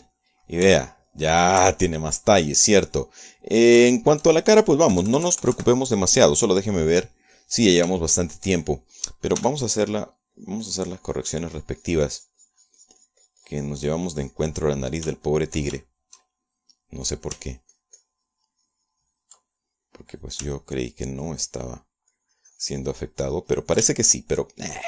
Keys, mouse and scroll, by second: 0.0 KP_Subtract, 2.3 shift+middle click, 3.2 shift+middle click, 3.9-5.8 shift+middle drag, 6.4 KP_Add, 8.2 click, 8.8 click, 9.5-11.4 shift+middle drag, 10.9 f, 11.4 click, 11.8-16.5 drag, 16.7 shift+middle click, 17.4 shift+click, 18.8-21.0 ctrl+drag, 21.4-23.5 drag, 23.6-24.8 ctrl+drag.